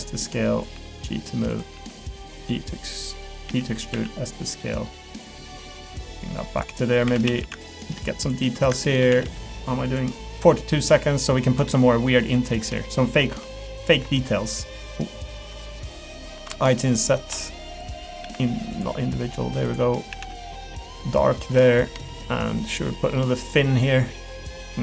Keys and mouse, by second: 0.4 middle click, 0.7 g, 1.7 s, 2.3 g, 3.5 e, 3.9 s, 4.6 middle click, 5.6 g, 6.7 middle click, 7.0 3, 7.2 a, 7.7 alt+click, 8.2 shift+click, 9.2 g, 10.4 middle click, 10.9 middle click, 11.5 3, 11.8 middle click, 12.5 shift+click, 12.9 middle click, 13.3 i, 14.9 middle click, 17.9 middle click, 18.2 alt+e, 20.1 a, 20.3 g, 21.2 middle click, 21.5 3, 21.7 middle click, 22.0 shift+middle click, 22.4 middle click, 23.2 middle click, 23.6 middle click, 24.2 click.